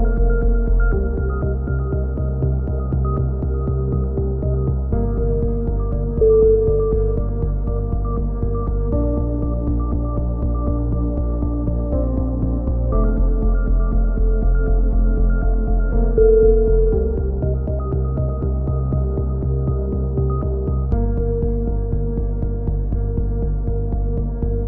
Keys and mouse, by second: 0.4 click, 2.0 c, 2.8-4.0 drag, 4.8 a, 6.6 ctrl+r, 7.7-9.1 drag, 10.7 a, 11.2 c, 12.1 click, 12.3 x, 13.7-15.7 middle drag, 14.4 c, 15.7-16.9 drag, 16.1 right click, 16.9 middle click, 17.2 c, 18.1-19.4 drag, 18.6 right click, 20.1 a, 20.4 z, 20.9 z, 21.2 z, 21.6 click, 22.4-24.5 middle drag, 23.2 z.